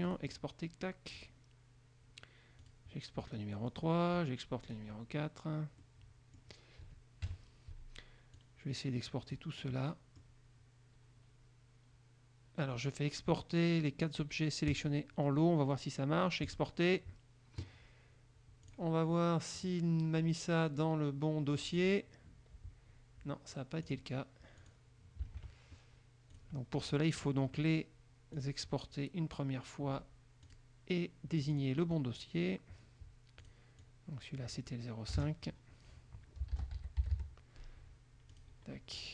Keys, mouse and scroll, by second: 0.2 click, 1.3 click, 2.7 click, 3.8 click, 4.8 click, 5.9 middle click, 7.4 KP_Subtract, 8.5-9.7 drag, 9.9 middle click, 14.8 click, 16.7 click, 18.9 click, 19.7 click, 21.8 click, 24.0 click, 24.7 click, 25.6 alt+Tab, 26.5 click, 27.1 click, 28.5 click, 30.6 click, 31.5 click, 33.6 click, 33.9 click, 35.3 KP_0, 36.5-37.8 typing, 38.5 click.